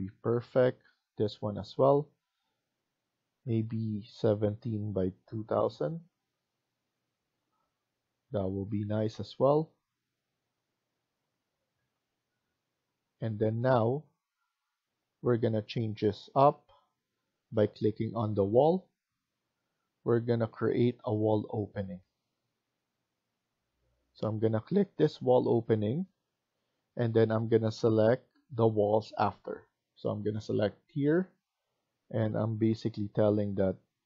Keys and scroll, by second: 0.6 Escape, 7.2 Escape, 7.5 Escape, 16.8 Escape.